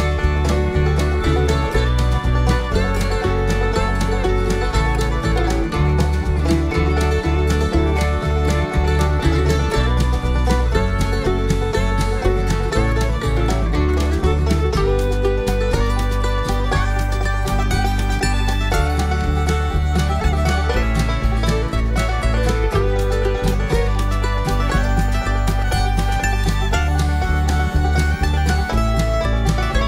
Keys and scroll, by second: 1.0 alt+Num_Lock, 4.2 ], 8.0 ], 10.7 ], 16.5 ], 17.0 ], 19.7 ], 22.3 ].